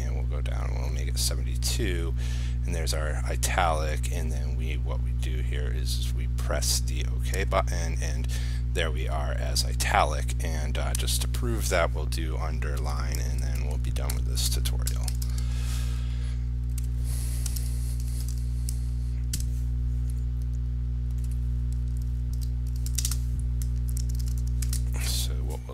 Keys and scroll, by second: 15.1 ctrl+c, 15.3 ctrl+v, 23.2 ctrl+space, 24.2 ctrl+s, 24.9 ctrl+r.